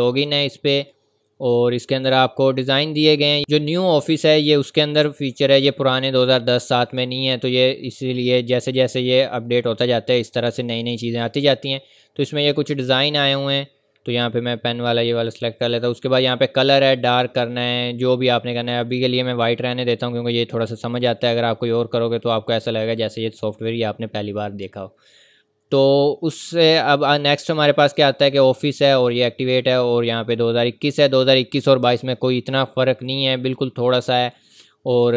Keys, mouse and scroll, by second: 14.2 click, 18.8 click, 21.2 click, 27.0 click, 30.1 click.